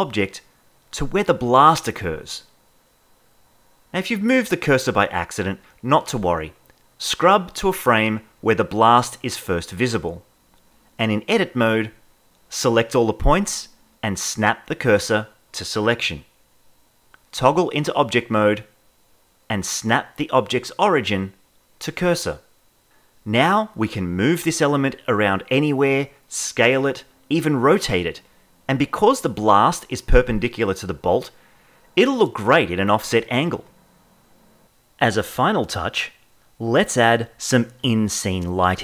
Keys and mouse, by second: 0.8 Left, 0.8 Right, 2.6 click, 6.8-8.3 drag, 10.6 ctrl+Tab, 13.1 l, 14.5 shift+s, 17.8 ctrl+Tab, 19.8-22.3 drag, 23.6 space, 25.0 r, 25.2 x, 25.3 x, 27.2 g, 27.4 z, 28.6 r, 28.9 y, 29.9 space, 33.5 space, 35.2-38.0 drag, 38.3 click.